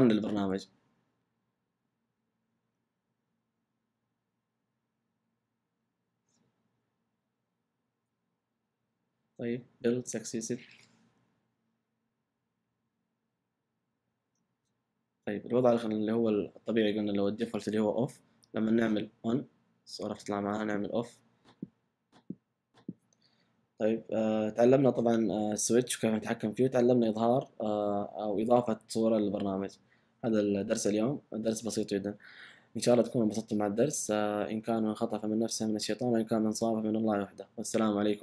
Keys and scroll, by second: 10.2 typing, 27.0 typing.